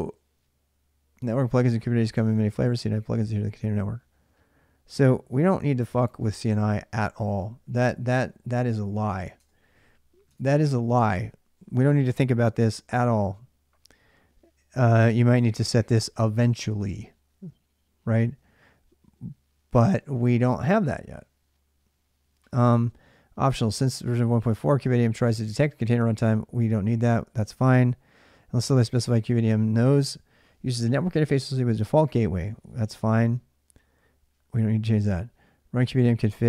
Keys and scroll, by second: 6.1-7.6 typing, 9.2 Return, 10.2 alt+Tab.